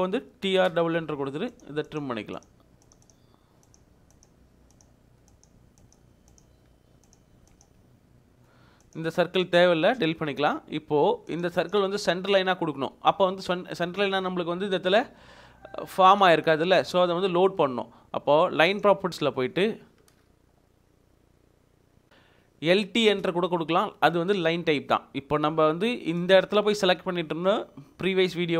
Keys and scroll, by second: 0.3-1.0 typing, 7.7 Escape, 10.7 Delete, 12.1 Escape, 17.6 Escape, 19.6 Escape, 22.1 t, 23.1 Return, 25.5 Escape.